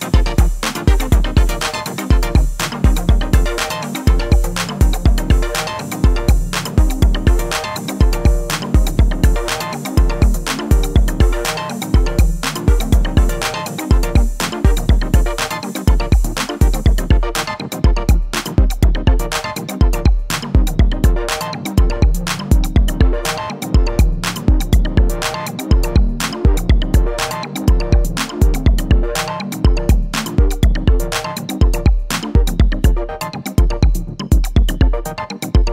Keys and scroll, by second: 8.2 r, 8.9 x, 16.0 s, 16.3 z.